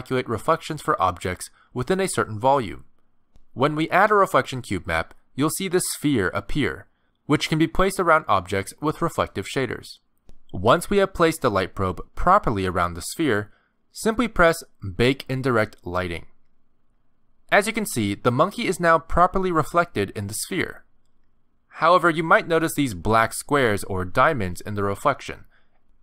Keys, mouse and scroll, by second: 0.4 middle click, 0.9 g, 1.9 s, 2.8 g, 3.5 middle click, 4.4 g, 5.5 middle click, 6.8 g, 7.5 middle click, 9.5 middle click, 12.1 s, 13.2 g, 14.1 middle click, 16.6 click, 18.1 middle click, 18.9-19.6 scroll up 9, 20.7 shift+middle click, 21.3 scroll up 2, 21.6 middle click, 22.1-22.9 scroll down 8, 22.9 middle click, 23.8 shift+middle click, 24.4 middle click, 25.6 middle click.